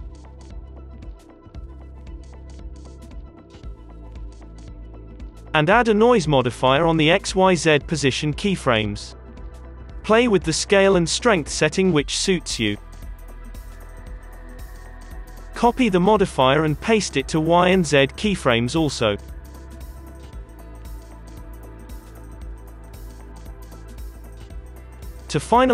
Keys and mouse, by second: 2.9 space, 3.5-5.4 drag, 4.8 n, 6.1-9.0 drag, 9.0 middle click, 9.7-13.9 drag, 9.8 space, 15.9 click, 15.9 space, 16.6-22.3 drag, 22.3 space, 22.4 click, 23.5 click, 23.6-24.7 drag, 23.8 space, 24.3 ctrl+s, 24.7 space, 24.9 space.